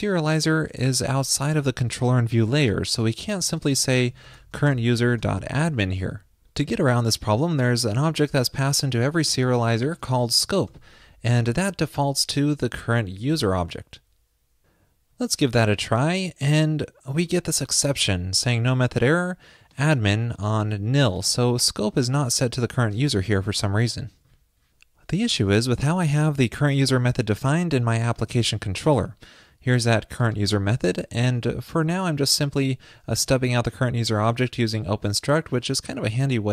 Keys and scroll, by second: 13.3 super+s.